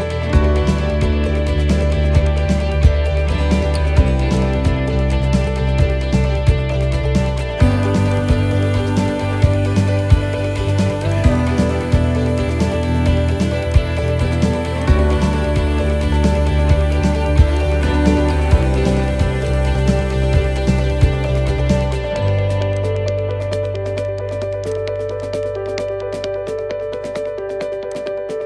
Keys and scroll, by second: 9.5 ctrl+t.